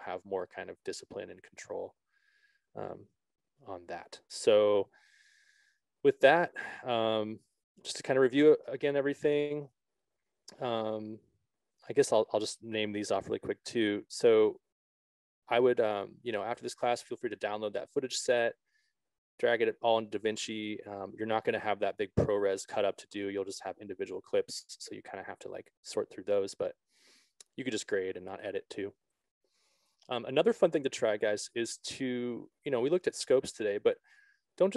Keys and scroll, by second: 9.4 Left, 12.4 Right.